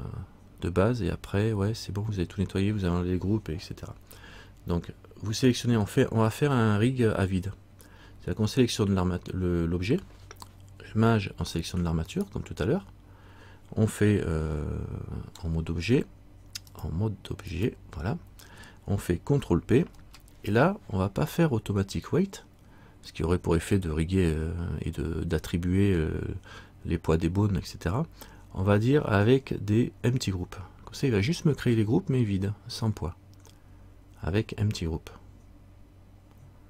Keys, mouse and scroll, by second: 12.3 shift+right click, 16.9 click, 20.0 ctrl+p.